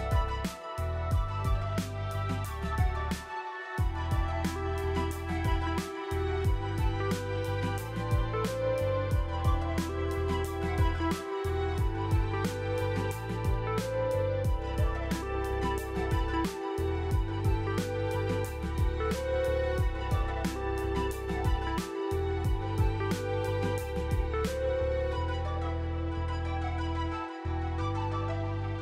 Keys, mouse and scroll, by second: 1.3 click, 3.0 click, 4.0 click, 5.6 click, 6.4 right click, 6.7 f, 7.3 right click, 7.6 middle click, 7.9 right click, 8.8 click, 10.1 click, 11.4 right click, 12.6 click, 14.5 click, 15.9 click, 16.6 right click, 17.4 click, 19.4 click, 19.5 click, 20.6 click, 21.1 click.